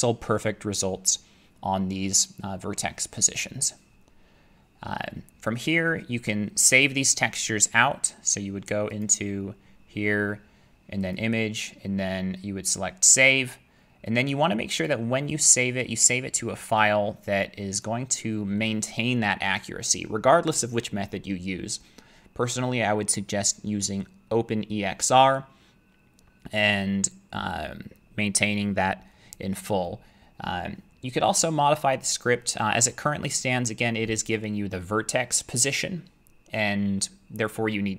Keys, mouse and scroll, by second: 6.3 middle click, 7.2 middle click, 9.0 click, 11.1 click, 14.9 click, 16.1 click, 17.8 click.